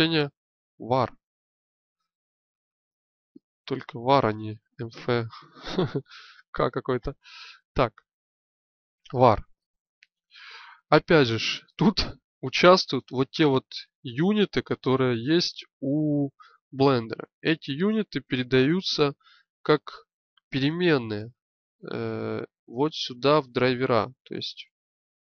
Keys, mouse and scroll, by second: 1.8 BackSpace, 2.1 BackSpace.